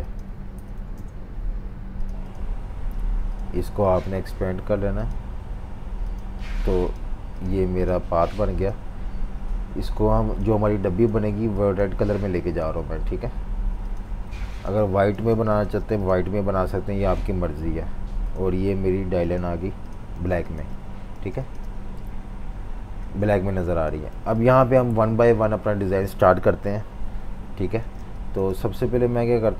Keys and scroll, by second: 0.3-1.2 typing, 15.1 typing, 20.1-21.2 typing, 23.0 z, 24.1 typing, 27.8 typing.